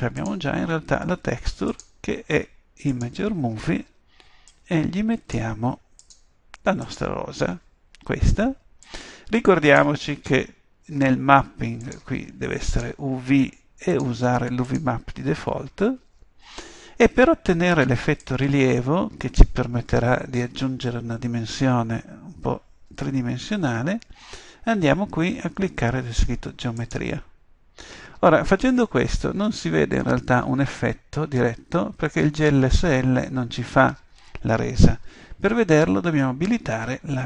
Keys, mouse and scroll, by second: 13.7 middle click, 15.9-18.2 middle drag, 28.8-31.0 middle drag, 31.9 middle click.